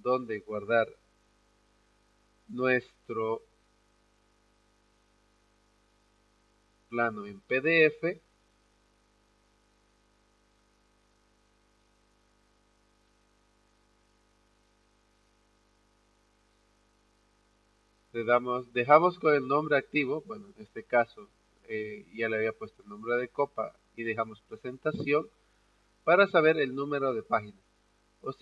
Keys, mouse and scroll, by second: 1.1 click, 5.5 click, 5.6 click, 7.7 click, 7.8 click, 9.2 click, 9.4 click, 11.1 click, 11.2 click, 12.7 click, 12.8 click, 16.1 click, 16.3-28.4 drag.